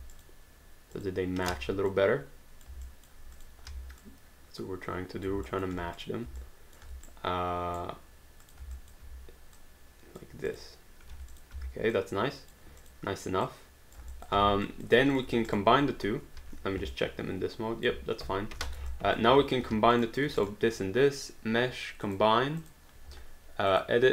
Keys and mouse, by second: 0.2 click, 1.6 ctrl+z, 2.0 click, 2.9 alt+click, 3.4 click, 3.7 w, 4.0 click, 5.6 alt+click, 6.0 click, 6.4 alt+click, 7.1 right click, 8.4 click, 8.8 alt+click, 9.6 click, 11.1 q, 11.3 click, 11.6 w, 12.0 click, 13.5 click, 14.1 alt+click, 14.3 alt+d, 14.7 alt+click, 15.1 click, 15.5 shift+click, 16.4 1, 16.9 alt+click, 19.0 alt+click, 19.6 q, 19.9 click, 20.4 shift+click, 22.0 click, 23.7 click.